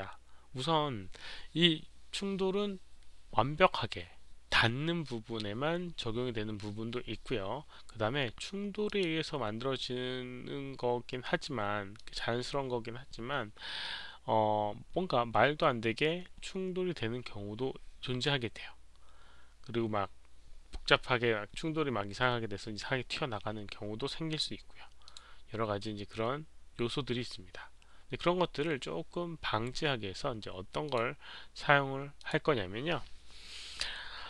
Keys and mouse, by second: 8.1 click, 8.8 click, 11.9 click, 19.6 click, 25.0 click, 30.8 click, 32.1 click.